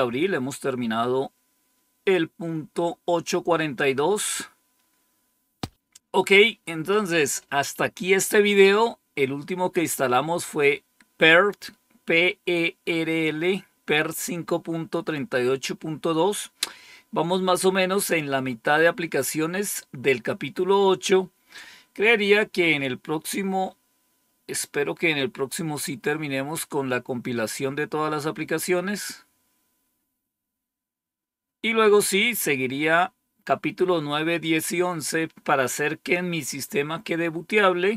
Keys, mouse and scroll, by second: 4.2 click, 20.7 scroll down 1, 23.0 scroll down 1, 28.1 scroll down 1, 28.8-29.7 scroll down 2, 29.7-32.6 scroll down 1, 32.6-33.3 scroll down 1, 33.6 scroll down 2, 34.2 scroll down 2.